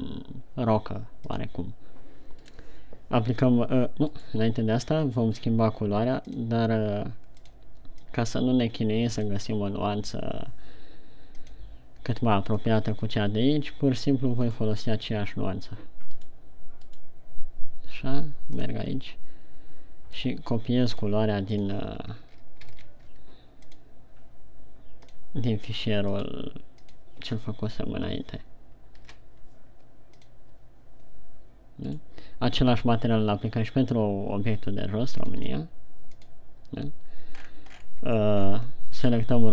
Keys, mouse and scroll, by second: 2.9 right click, 4.7 right click, 6.7 click, 25.5 click, 32.2 right click, 35.7 click, 37.9-39.0 shift+scroll down 13, 39.4 right click.